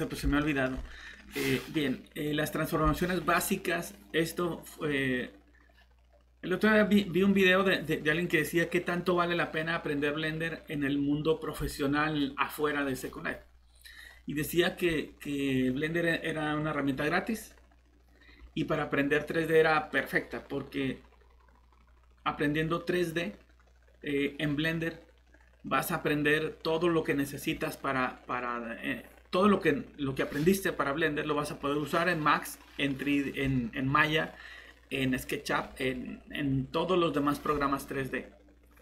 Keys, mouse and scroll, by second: 0.4 middle click.